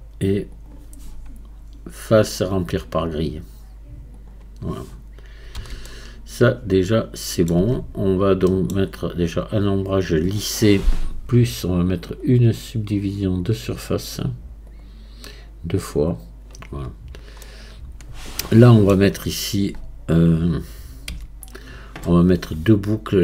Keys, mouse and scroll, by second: 2.2-4.9 drag, 4.9-5.9 scroll down 1, 5.9-7.6 middle drag, 7.6 Tab, 8.0-8.5 scroll down 1, 8.5 middle click, 9.2-12.2 right drag, 12.2-16.8 drag, 16.8-17.4 scroll up 2, 17.4-19.1 middle drag, 19.1 scroll up 2, 19.7 scroll down 2, 20.7-21.1 scroll up 1, 21.1 Tab.